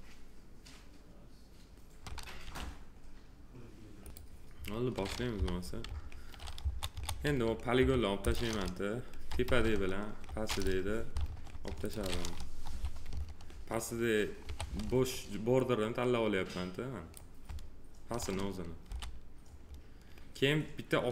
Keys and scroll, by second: 2.4 f, 5.3 p, 6.6 F4, 9.5 space, 14.4 3, 18.9 f.